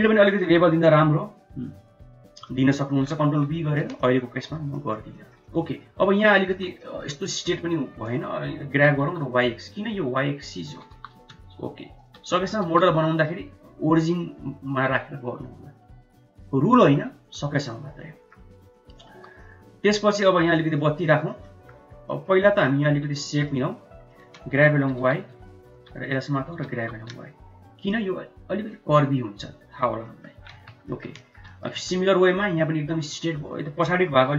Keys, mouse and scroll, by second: 0.1 middle drag, 0.4 1, 0.9 Tab, 2.5 middle click, 3.6 middle click, 4.0 shift+middle click, 4.8 middle click, 5.2 shift+middle click, 5.5 middle click, 6.5 3, 6.8 middle click, 7.5 click, 8.8 g, 10.8 g, 12.4 middle click, 12.7 Tab, 13.1 middle click, 15.6 middle click, 16.8 middle click, 17.2 Tab, 17.8 middle click, 18.5 Tab, 18.8 middle click, 19.2 1, 19.4 middle click, 19.8 middle click, 20.6 middle click, 21.5 middle click, 22.6 middle click, 23.4 click, 24.8 g, 26.1 click, 26.6 g, 30.1 middle click, 30.6 Tab, 31.0 middle click, 31.2 shift+middle click, 31.6 click, 31.8 Tab, 33.2 click.